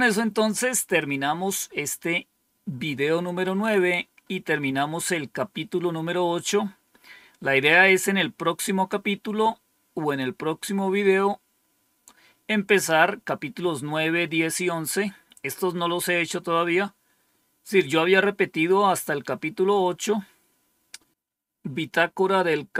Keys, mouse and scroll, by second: 0.3-1.0 scroll down 2, 3.0-4.1 scroll down 4, 4.1-5.0 scroll down 2, 5.0 scroll down 1, 5.7 scroll down 2, 6.3-6.9 scroll down 2, 6.9-7.5 scroll down 1, 7.5-8.2 scroll down 1, 8.2-8.9 scroll down 1.